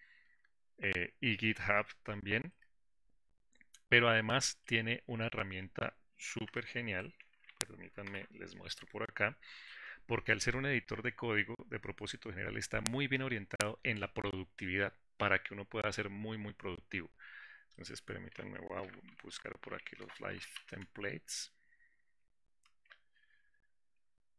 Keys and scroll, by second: 9.7 ctrl+alt+s.